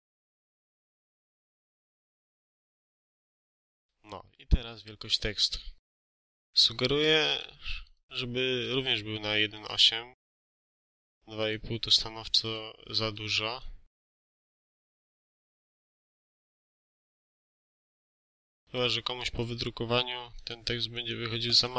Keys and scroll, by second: 0.0-3.7 typing, 0.5 Return, 4.1 Escape.